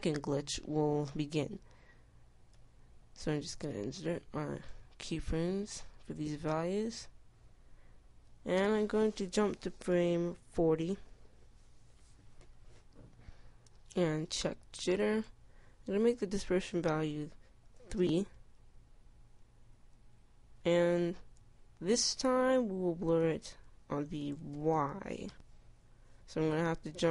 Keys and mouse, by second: 0.8 i, 2.0 i, 3.5 i, 4.0 i, 4.5 i, 7.6-11.3 middle drag, 7.6 i, 14.8-26.3 drag.